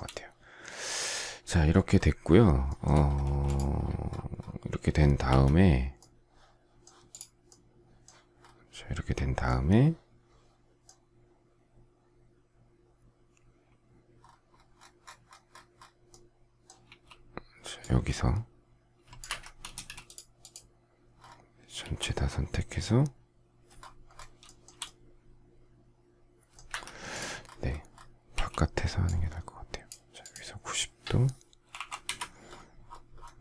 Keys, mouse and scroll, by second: 2.7 shift+middle click, 3.2 space, 5.2 Escape, 16.8 q, 19.2 Escape, 19.6 space, 21.8 ctrl+a, 24.4 shift+middle click, 26.7 Escape, 28.3 q, 31.7 9, 32.0 Return.